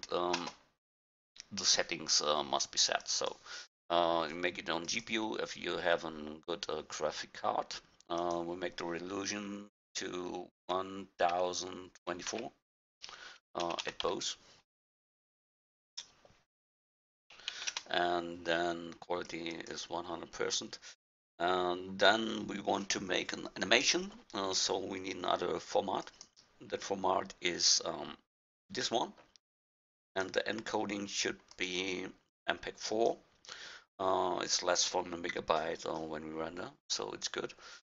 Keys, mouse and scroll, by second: 3.1-7.8 drag, 8.2-12.9 drag, 13.9 BackSpace, 15.7-18.0 drag, 19.3-23.1 drag, 26.1-28.3 drag, 30.1-33.4 drag.